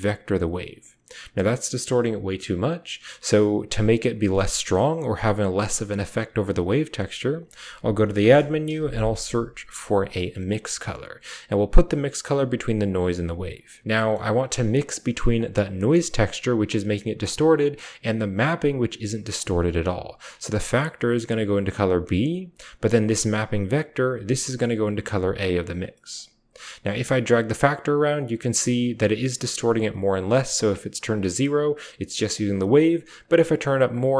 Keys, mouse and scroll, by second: 0.0-0.4 typing, 4.1 click, 5.1 click, 6.0 click, 6.0-6.9 typing, 10.6 typing, 12.6-13.6 typing, 12.7 click, 13.1 click, 13.9 click, 14.2 drag, 14.7 middle click, 15.0-15.6 middle drag, 17.6-18.7 drag, 19.2 click, 19.2 typing, 20.5-21.3 typing, 20.7 click, 20.9-21.7 drag, 22.0 click, 22.8 drag, 23.3 typing, 23.6-24.9 drag, 24.6-26.3 typing, 25.2 click, 26.8 click, 30.0 click, 32.2 click, 33.1 click.